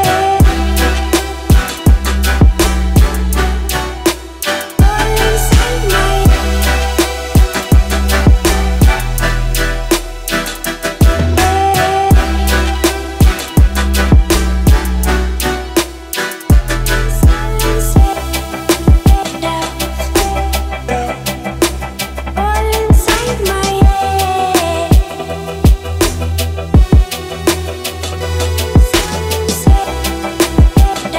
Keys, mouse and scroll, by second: 0.6-1.2 scroll up 1, 1.2-2.1 middle drag, 3.0 click, 5.9 Left, 8.5 click, 9.5 Return, 10.2-13.1 typing, 13.9 Return, 15.9-18.4 drag, 23.4 ctrl+d, 24.3 v, 24.9-25.8 middle drag, 26.7-31.1 drag.